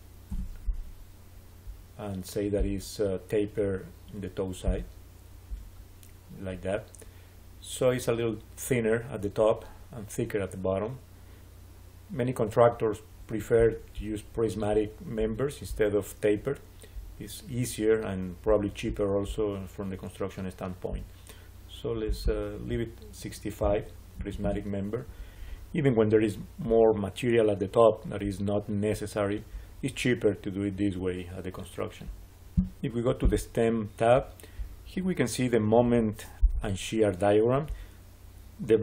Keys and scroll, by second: 0.2 Return, 23.5 6, 24.1 5, 24.3 Return.